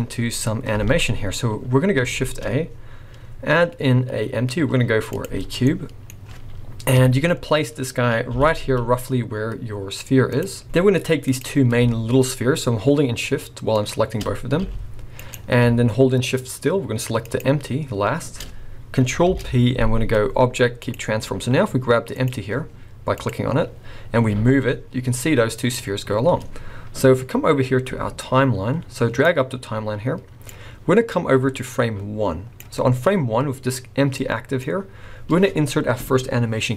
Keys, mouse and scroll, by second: 0.8 alt+a, 1.3 scroll down 2, 1.8 scroll up 1, 2.1 shift+a, 5.5 scroll down 4, 5.6 middle click, 7.0 KP_1, 7.5-8.2 scroll up 7, 8.3 g, 10.6 scroll down 2, 10.6 middle click, 10.7-11.3 scroll up 3, 11.3 click, 13.8 shift+click, 14.6 g, 17.2 shift+click, 19.3 ctrl+p, 22.1 click, 23.1 click, 24.3 g, 29.3 click, 31.2 click, 33.4-34.2 scroll down 1, 34.2 middle click, 34.7 scroll up 2.